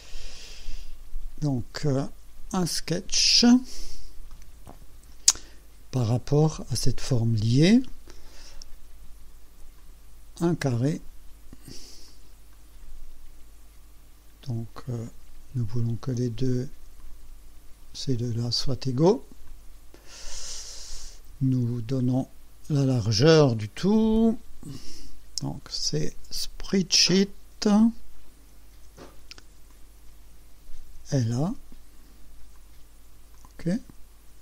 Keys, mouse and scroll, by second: 0.1 click, 1.1 scroll down 2, 2.7 click, 3.9 scroll up 2, 4.4-5.2 right drag, 9.8 click, 11.0 click, 12.1 click, 12.6 right click, 15.1-16.0 drag, 17.1 click, 18.3 click, 19.5 click, 22.0 click, 23.1 click, 25.5 click, 28.8 s, 29.8 click, 30.9 l, 31.5 a, 32.6 click, 33.4 click.